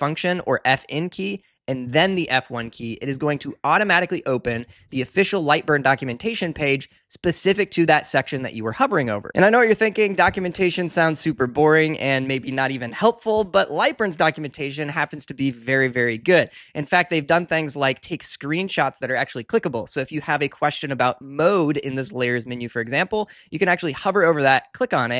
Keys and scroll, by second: 1.8 F1.